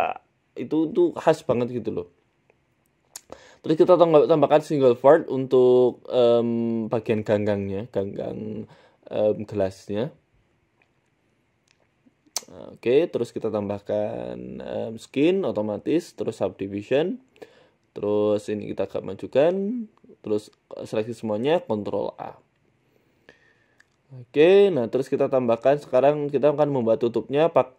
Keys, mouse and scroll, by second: 1.8 Tab, 2.1 g, 3.3 Tab, 3.8 e, 4.5 e, 7.2 right click, 7.7-11.4 typing, 12.5 Tab, 13.6 click, 14.5 click, 15.3 click, 17.1 click, 18.5 Tab, 19.0 right click, 20.3 a, 20.3 q, 21.1 a, 22.9 Tab, 23.3 middle click, 23.8 middle click, 24.3 KP_1, 24.6 shift+a, 27.5 g.